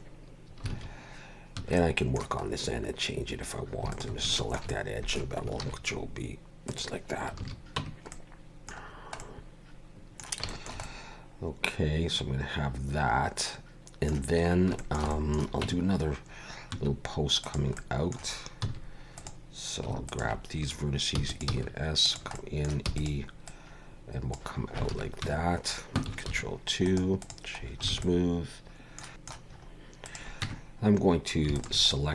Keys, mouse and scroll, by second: 0.7 alt+a, 1.6 2, 1.8 middle click, 2.5 scroll up 1, 3.9 alt+shift+click, 4.3 shift+middle click, 4.7 middle click, 5.7 ctrl+b, 7.4 alt+a, 7.8 Tab, 8.1 middle click, 8.8 scroll down 3, 9.2 middle click, 10.5 shift+middle click, 10.8 middle click, 14.5 scroll up 1, 14.8 shift+middle click, 15.1 middle click, 15.6 Tab, 16.7 1, 17.4 click, 17.7 middle click, 18.6 x, 20.1 alt+shift+click, 21.1 e, 21.5 s, 22.3 middle click, 22.8 e, 23.4 click, 24.9 alt+a, 25.2 Tab, 26.3 ctrl+2, 26.8 right click, 27.6 scroll down 3, 27.9 alt+a, 28.0 middle click, 29.6 scroll up 2, 30.0 click, 30.4 Tab, 31.5 alt+shift+click, 31.9 middle click.